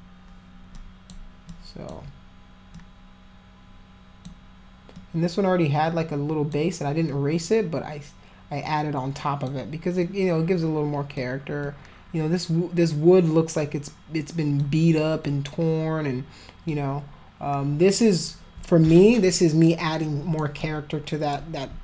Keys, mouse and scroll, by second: 0.7 alt+click, 1.5 alt+click, 2.7-4.2 alt+drag, 4.9-6.5 alt+drag, 7.1-9.4 alt+drag, 10.0-11.2 alt+drag, 11.6-14.6 alt+drag, 15.2-16.7 alt+drag, 19.2 alt+middle click, 20.0 alt+middle click, 20.6 alt+click.